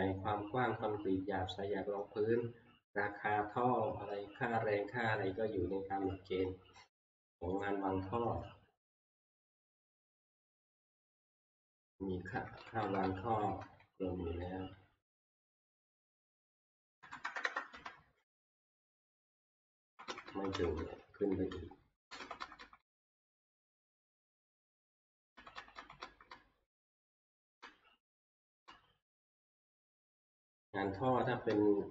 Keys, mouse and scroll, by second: 8.2 click, 9.8 click, 12.3 Left, 12.6 Left, 12.8 Left, 13.0 Left, 13.2 Left, 13.6 Left, 15.6 click, 17.0 typing, 17.7 Return, 19.0 typing, 19.0 click, 19.8 Left, 20.1 Left, 20.2 Left, 20.5 Left, 20.8 Left, 21.0 Left, 21.1 Return, 21.2 Left, 21.9 Left, 22.2 Left, 22.4 Left, 22.6 Left, 22.9 Left, 23.0 Left, 23.3 Left, 23.6-25.1 Left, 25.4 Left, 25.5 Left, 25.8 Left, 26.0 Left, 26.3 Left, 27.1 Left, 27.4 Left, 27.6 Left, 28.3 Left, 28.6 Left, 31.1 click, 31.5 Left.